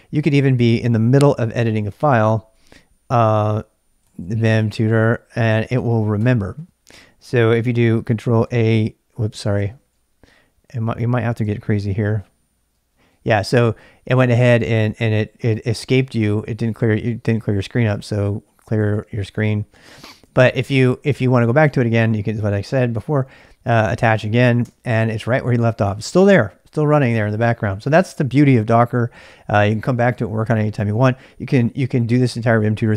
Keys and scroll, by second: 0.0-0.2 typing, 1.7-5.9 typing, 6.2 Return, 8.4 ctrl+a, 9.4-11.1 typing, 11.7 ctrl+p, 12.1 ctrl+q, 17.9-20.6 typing, 21.7 ctrl+[, 21.9 k, 22.1 k, 22.5 k, 24.6 Return, 28.5-30.4 typing.